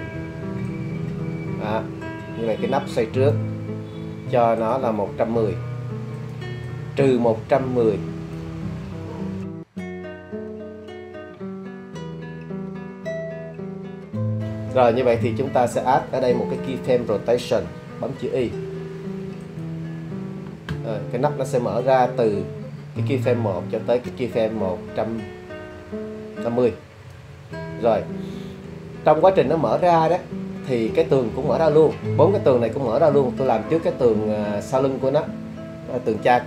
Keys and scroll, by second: 9.4 1, 9.6 1, 9.8 0, 11.0 Return, 18.4 i.